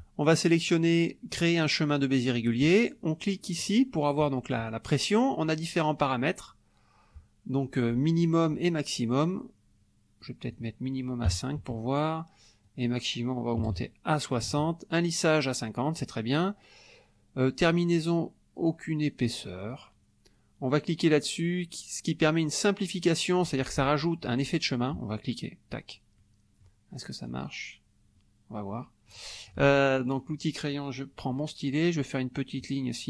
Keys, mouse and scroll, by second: 3.6 click, 4.6 click, 10.2 click, 11.3 KP_5, 12.6 click, 13.6 KP_6, 13.9 KP_0, 14.4 Tab, 17.8 click, 25.3 click, 26.2 middle click, 27.3 click, 28.1-29.3 middle drag, 32.6-33.0 drag.